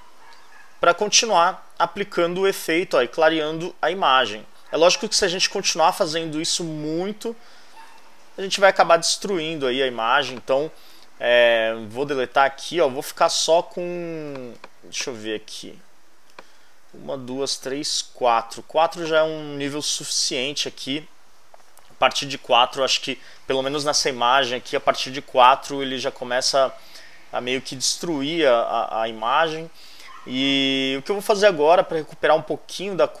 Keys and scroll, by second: 0.4 super+j, 3.0 super+j, 5.0 super+j, 10.8 shift+BackSpace, 11.7 BackSpace, 19.7 shift+BackSpace, 20.5 BackSpace.